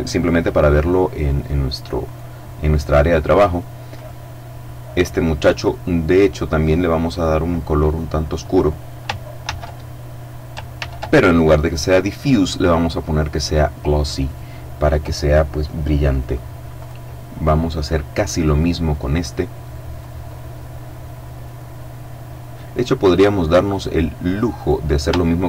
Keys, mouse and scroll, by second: 1.4 right click, 3.3 click, 6.4 click, 7.2 click, 8.8 ctrl+c, 10.2 ctrl+v, 11.2 click, 13.6 click, 16.1 right click, 19.0 click, 23.9 right click, 25.0 shift+right click.